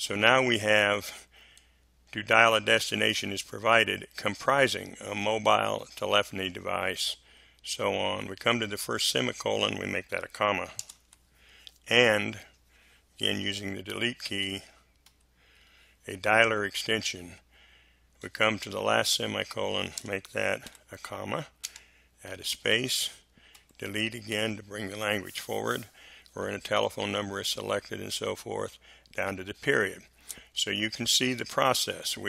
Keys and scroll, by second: 10.7 BackSpace, 10.9 ,, 13.2 space, 14.4 Delete, 19.9 BackSpace, 20.6 ,, 21.6 space, 23.5 Delete.